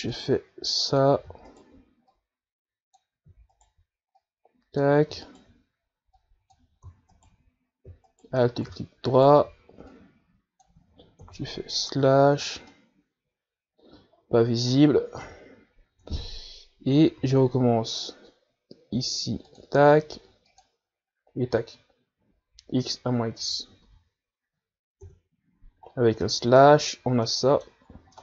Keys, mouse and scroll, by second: 0.7 alt+right click, 1.3-2.7 drag, 2.7 alt+right click, 3.3-4.8 drag, 4.8 alt+right click, 5.4-6.5 drag, 6.5 alt+right click, 7.4 click, 8.4 alt+right click, 9.3 alt+right click, 10.3 alt+right click, 11.2-12.5 drag, 12.5 KP_Divide, 13.2 Tab, 14.0-16.5 middle drag, 16.5 KP_Divide, 17.2 Tab, 18.2 a, 18.4 a, 20.7-23.8 drag, 24.6 Tab, 25.1 a, 26.3 KP_Divide, 27.2 scroll down 3, 27.5-28.0 middle drag, 28.0-28.2 scroll up 5.